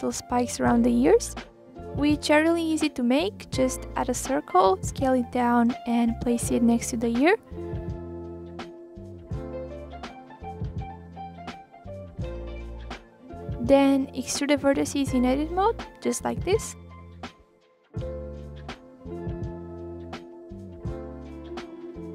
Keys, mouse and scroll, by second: 0.1 click, 0.9 r, 1.6 g, 2.4 click, 2.7 scroll down 4, 3.0 shift+a, 4.2 click, 4.8 click, 5.3 r, 6.2 middle click, 6.5 scroll down 1, 6.7-7.1 scroll up 2, 7.1 s, 7.8 KP_3, 8.0-8.3 scroll up 2, 8.3 click, 8.7 s, 9.6 scroll up 1, 9.6-10.1 middle drag, 10.1 click, 10.7 middle click, 11.0 scroll up 2, 11.3-11.8 middle drag, 11.8 click, 12.5 KP_1, 13.2-14.4 drag, 14.4 e, 16.4 ctrl+r, 17.0 click, 17.6 s, 19.3 click, 19.7 click, 20.0 s, 21.0 g, 21.7 ctrl+z, 22.0 a.